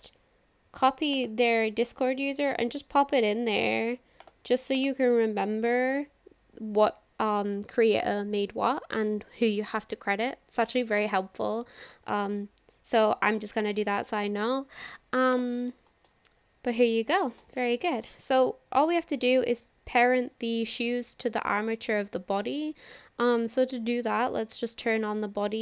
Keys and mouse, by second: 16.1-16.8 shift+middle drag, 17.8 shift+middle click, 18.1-19.1 middle drag, 20.3-21.1 drag, 21.7 shift+drag, 22.1 click, 24.7 click.